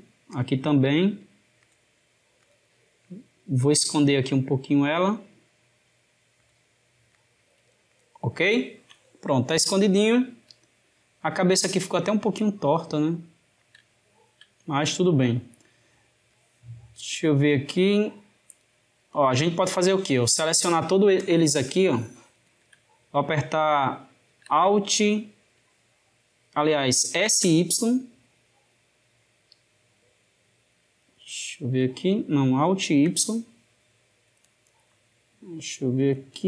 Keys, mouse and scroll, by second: 0.2 click, 0.7 g, 2.2 click, 2.9 g, 6.9 click, 7.2 g, 8.4-12.9 ctrl+middle drag, 13.7-16.1 shift+middle drag, 16.1 click, 21.0 shift+click, 24.1 s, 32.6 alt+s.